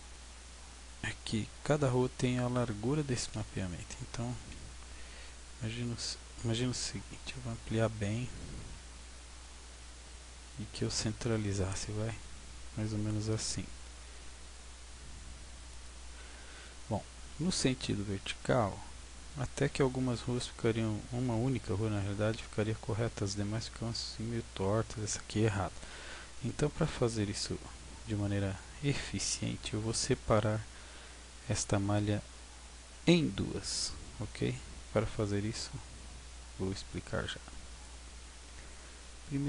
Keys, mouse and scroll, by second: 0.1 scroll down 2, 0.7-1.5 scroll down 3, 4.3 s, 8.4 click, 8.6 g, 10.8 click, 11.8 g, 15.8 click, 16.2 Tab, 16.8-17.4 scroll up 3, 17.4 scroll up 1, 19.0-20.0 scroll down 2, 20.0-20.7 scroll down 1, 27.1 Tab, 27.8-28.9 scroll down 11, 30.5-32.1 scroll down 2, 32.8 scroll up 4, 34.4-34.8 scroll down 2, 36.9 click, 38.4 Tab.